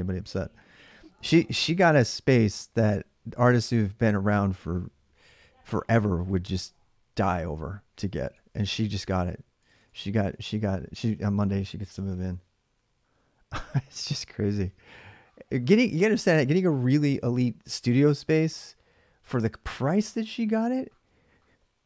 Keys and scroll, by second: 8.1-10.6 typing.